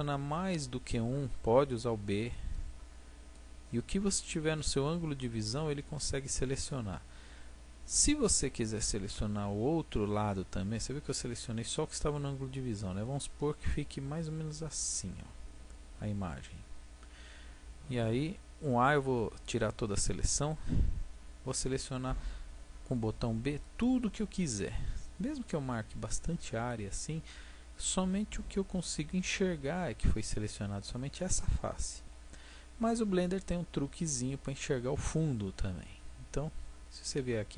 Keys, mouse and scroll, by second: 0.3-2.0 middle drag, 2.0-3.3 drag, 2.1 b, 4.6-6.3 middle drag, 6.3-16.5 drag, 16.5-18.5 middle drag, 19.1 a, 23.1 b, 28.4-29.5 middle drag.